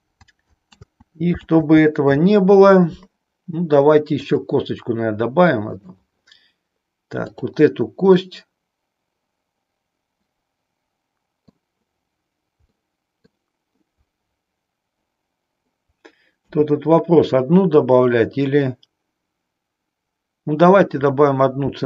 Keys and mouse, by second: 0.8 ctrl+z, 4.1-5.9 drag, 7.1 click, 8.3-11.6 middle drag, 12.6 middle click, 16.3 KP_3, 21.6 e.